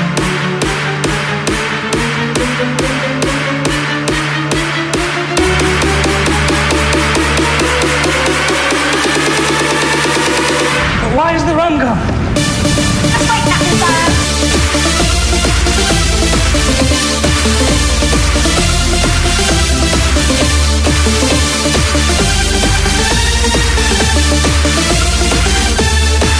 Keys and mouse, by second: 0.3 KP_Subtract, 4.3 shift+c, 5.6 shift+a, 8.2 KP_Subtract, 10.9 s, 17.6 click, 20.9 KP_1, 23.6 click.